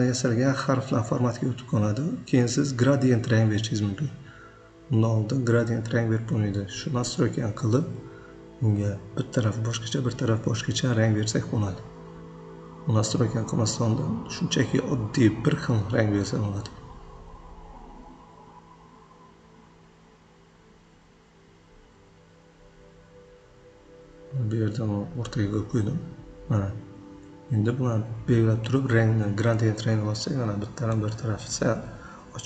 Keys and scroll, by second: 4.4 Up, 8.0 Right, 13.0 Right, 13.3 ctrl+g, 26.2 ctrl+a, 26.4 9, 26.7 Return.